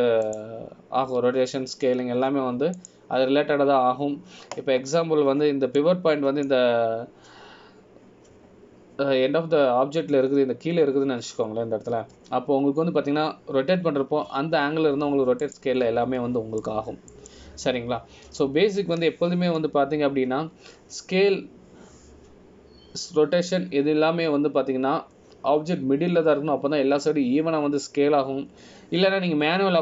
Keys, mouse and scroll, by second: 7.9 middle click, 18.2-18.8 scroll down 1, 18.8 middle click, 20.1-21.3 scroll up 1.